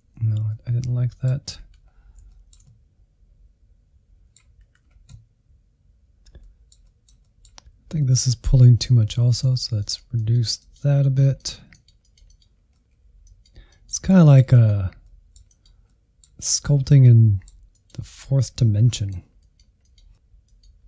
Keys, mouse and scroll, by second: 0.8 click, 0.9 scroll up 1, 1.1 middle click, 1.3 click, 1.6 scroll up 1, 1.7 middle click, 1.9 click, 2.3 middle click, 2.5-3.5 drag, 3.5 middle click, 3.8 click, 4.6 scroll down 2, 4.7 middle click, 4.9 click, 5.1 scroll down 1, 5.3 middle click, 5.5 click, 5.8 scroll up 2, 5.9-7.6 shift+middle drag, 7.6-9.5 drag, 9.5 scroll down 1, 9.7-10.8 middle drag, 10.8 scroll up 1, 10.9 Insert, 11.1 middle click, 11.5 Insert, 11.8 click, 12.3 middle click, 12.5 click, 12.7 middle click, 13.0 click, 13.2 middle click, 13.5 click, 13.9 middle click, 14.1 click, 14.7 middle click, 15.0 click, 15.4 middle click, 15.7-16.7 drag, 17.1 click, 18.1 middle click, 18.4 click, 18.6 middle click, 18.8 click, 19.2-20.3 middle drag, 20.3 scroll down 2, 20.3 middle click.